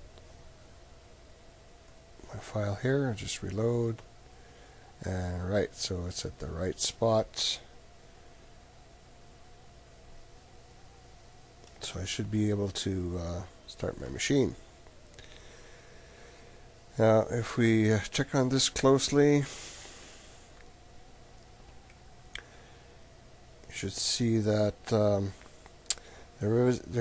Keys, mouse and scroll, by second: 1.8-5.1 drag, 12.3 ctrl+middle click, 18.1 middle click, 18.4 middle click, 19.2 click, 22.4-23.7 middle drag, 25.5 middle click.